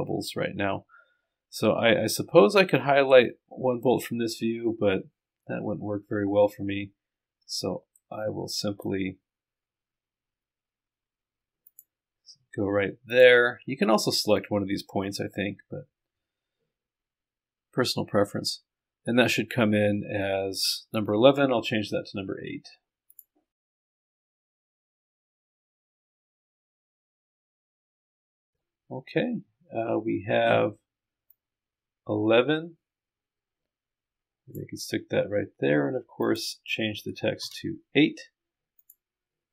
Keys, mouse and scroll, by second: 23.1 click, 28.4-29.3 scroll down 2, 29.3-30.7 scroll down 1, 31.3-34.9 drag, 36.2 click, 38.8 click.